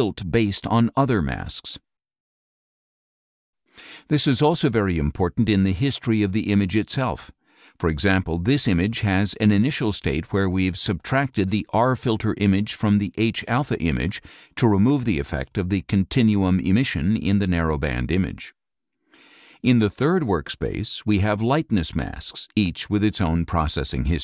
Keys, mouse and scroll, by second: 1.5 click, 4.3 right click, 5.9 click, 7.2 click, 9.2 click, 12.0-13.2 drag, 17.5 click, 22.1 right click.